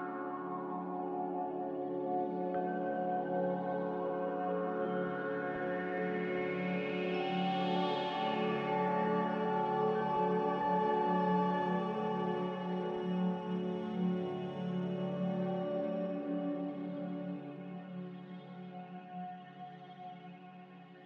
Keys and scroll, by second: 8.9 m, 11.9 Escape.